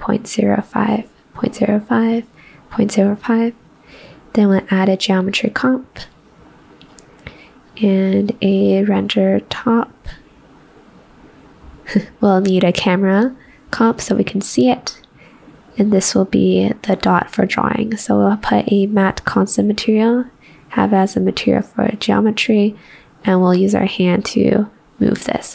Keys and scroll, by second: 2.6 ctrl+v, 2.6 ctrl+v.